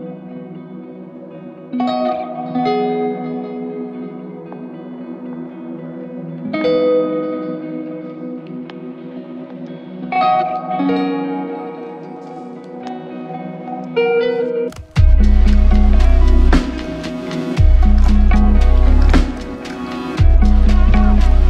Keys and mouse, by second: 3.6-4.4 typing, 6.0 alt+click, 13.3 double click.